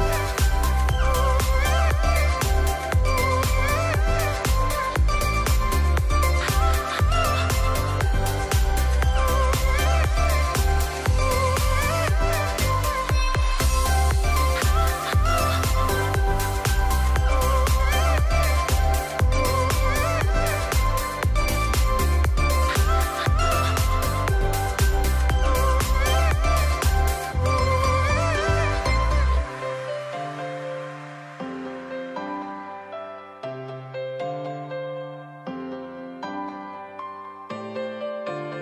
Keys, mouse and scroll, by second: 0.4 click, 0.9 ctrl+click, 6.6 ctrl+shift+i, 7.4 alt+right click, 8.5 alt+scroll down 1, 8.7 alt+right click, 9.1 x, 10.5-12.1 drag, 18.4 ctrl+d, 20.7-21.0 alt+scroll up 1, 22.8 shift+click, 23.5 ctrl+e, 25.7 click, 26.2 right click, 27.1 click, 27.4 right click, 28.3 click, 29.0 alt+right click, 30.2-34.6 drag.